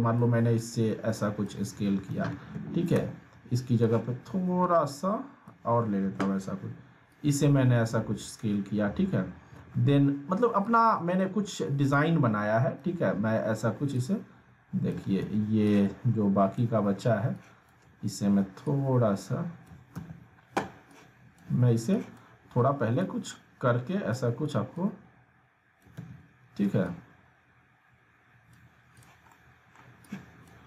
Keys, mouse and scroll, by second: 0.1-1.7 drag, 1.8 alt+w, 2.5 ctrl+z, 3.8-5.7 drag, 5.8 alt+w, 7.1-8.6 drag, 9.6 alt+w, 10.6-11.2 click, 11.9-12.8 ctrl+drag, 15.2 ctrl+z, 15.7-16.6 drag, 17.3-18.0 ctrl+drag, 20.0 ctrl+z, 20.9-21.5 click, 23.0-24.2 drag, 26.0 ctrl+z, 26.8-28.7 drag, 29.6-30.0 scroll down 1, 30.0-30.6 drag.